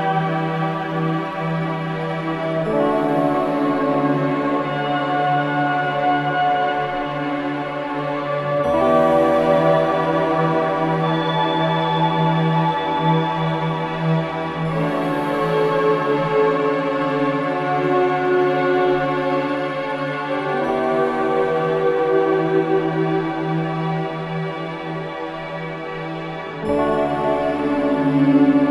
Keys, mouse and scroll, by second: 2.1 click, 4.8 alt+click, 5.3 ctrl+z, 6.1 click, 8.1 ctrl+z, 8.7 ctrl+z, 9.8 click, 10.0 ctrl+z, 11.9-15.1 drag, 13.4-15.1 drag, 15.1-16.8 scroll up 1, 16.8-23.0 drag, 23.0-24.3 scroll down 1, 25.7 click, 25.8 click, 27.4 click, 27.8 alt+click, 28.2 alt+right click, 28.6 click.